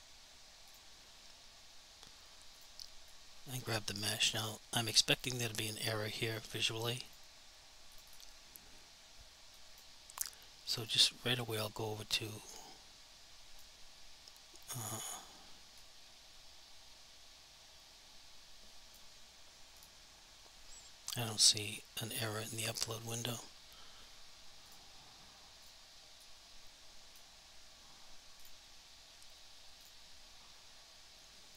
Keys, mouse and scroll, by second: 0.7 click, 3.2 click, 5.2 click, 8.1 double click, 9.7 click, 10.8 click, 12.4 click, 14.9 click, 15.9 click, 19.8 click, 24.6 click, 26.3 click, 28.4 shift+click, 29.8 click.